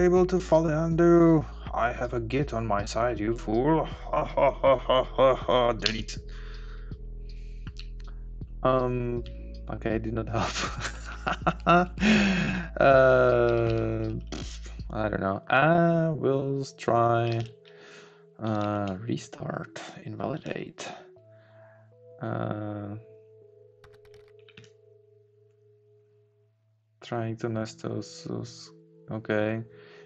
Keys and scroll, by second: 7.8 Down, 14.8 Up, 17.5 ctrl+shift+a.